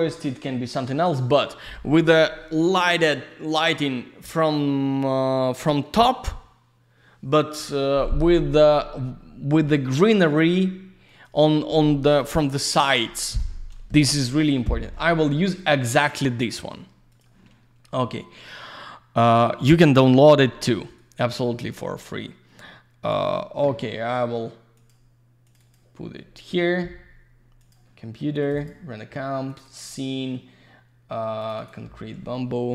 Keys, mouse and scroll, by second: 11.1 click, 11.2 click, 11.4 click, 11.5 click, 17.1 click, 17.2 click, 21.0 click, 24.7 click, 24.9 click, 25.4 click, 25.5 click, 27.6 click, 27.7 click, 28.4 click, 28.7 double click, 29.5 click, 29.6 click, 29.6 click, 29.7 double click, 31.4 click, 31.5 click, 31.6 click, 31.6 double click.